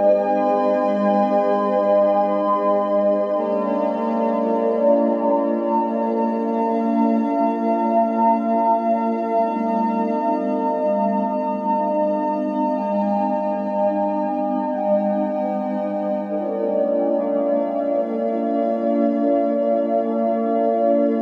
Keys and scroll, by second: 3.2 Escape, 8.3 Escape, 10.0 ctrl+p.